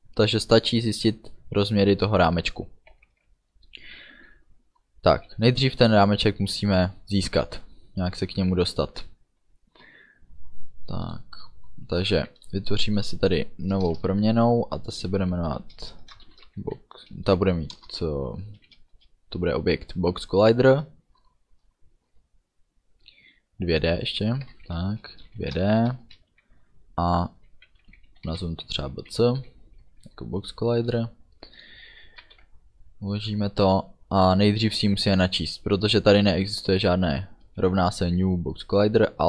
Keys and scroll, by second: 13.8 Return, 16.3 shift+b, 16.5 o, 16.7 x, 17.8 Return, 19.0 space, 24.5 BackSpace, 25.2 2, 25.4 shift+d, 26.1 space, 32.3 ctrl+s.